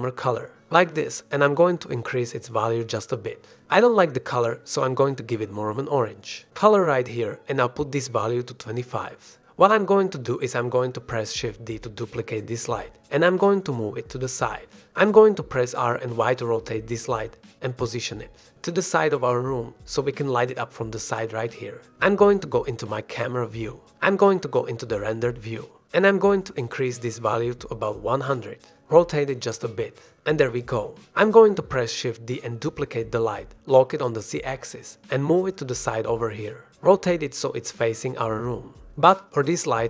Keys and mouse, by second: 4.3-6.7 drag, 7.1 click, 8.0-9.5 drag, 10.8 ctrl+s, 12.2 shift+d, 12.7 shift+z, 14.0 drag, 14.5 middle click, 14.8 shift+middle click, 15.5 r, 15.5 z, 20.0-21.9 drag, 21.3 KP_0, 23.5 r, 23.7 z, 25.0 click, 25.3 r, 25.5 z, 26.6 g, 26.6 z, 28.4 drag, 29.2 ctrl+s, 30.7 shift+d, 31.6 shift+z, 33.7 e, 33.7 r, 34.1 z, 37.2 g, 37.6 shift+z, 38.6 click, 38.9 g, 39.1 z.